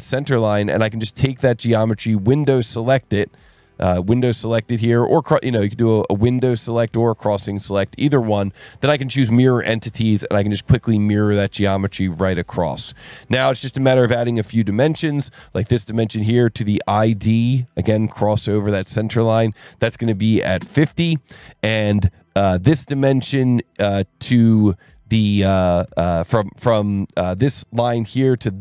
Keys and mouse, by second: 0.3-2.3 drag, 3.6 click, 5.7 click, 9.2 click, 12.3 click, 13.1 s, 13.7 click, 14.7 click, 15.7 click, 19.6 click, 20.3 KP_5, 20.5 KP_0, 20.6 KP_Enter, 27.2 click, 28.5 click.